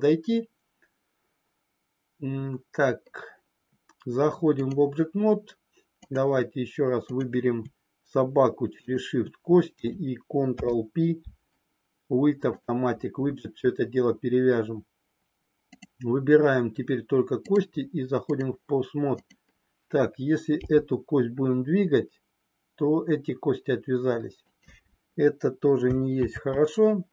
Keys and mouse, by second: 6.0 click, 8.8 shift+click, 10.4 ctrl+p, 15.6 click, 17.4-18.5 drag, 24.4 click, 26.4 ctrl+z.